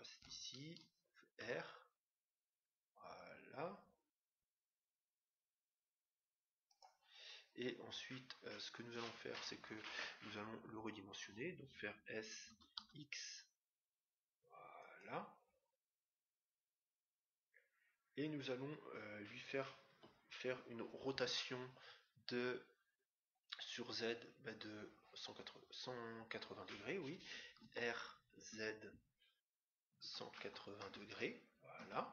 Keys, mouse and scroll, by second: 1.3 r, 12.4 s, 19.8 KP_7, 27.6 r.